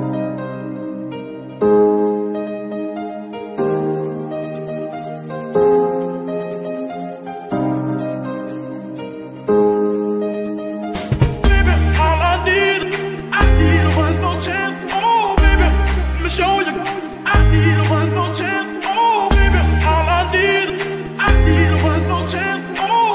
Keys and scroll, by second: 0.0 Escape, 0.6 g, 3.3 g, 5.7 Escape, 6.8 g, 7.5 Escape, 8.5 g, 11.1 Escape, 12.2 g, 13.3 Escape, 13.9 g, 15.5 Escape, 16.1 g, 17.6 Escape, 19.0 g, 20.4 Escape, 21.9 g, 22.9 Escape.